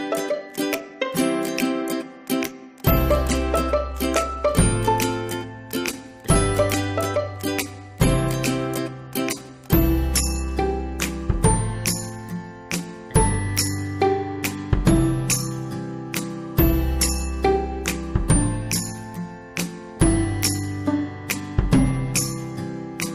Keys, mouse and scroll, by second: 1.4 ctrl+v, 4.6 click, 7.8 ctrl+v, 8.6 click, 14.8 click, 15.2 right click, 16.6 click, 20.8 right click, 22.2 click.